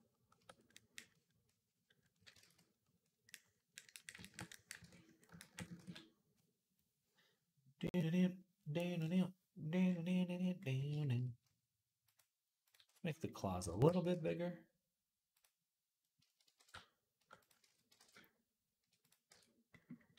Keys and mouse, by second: 2.2 ctrl+z, 4.6 ctrl+Tab, 5.6 ctrl+s, 13.2-20.1 shift+middle drag, 13.5 Tab, 13.7 a, 14.0 s, 16.4 alt+s, 17.4 ctrl+z, 17.8 alt+s, 19.1 Tab.